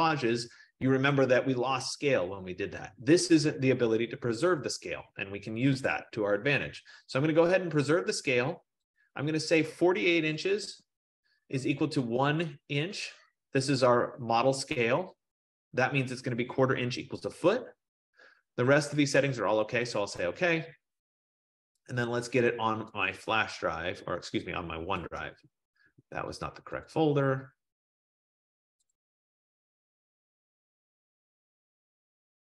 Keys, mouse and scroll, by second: 6.0 click, 9.7 click, 10.5-10.9 typing, 20.0 click, 23.1 click, 25.4 click, 25.6 click, 27.1 click, 29.0 click, 29.1 click, 30.4 F15, 30.7 click, 30.9 click, 32.2 click.